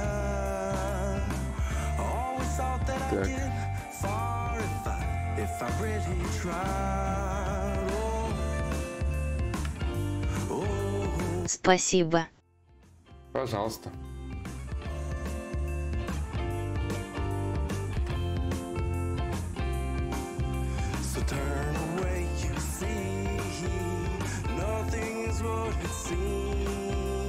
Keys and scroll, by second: 17.4 ctrl+z, 18.2 d.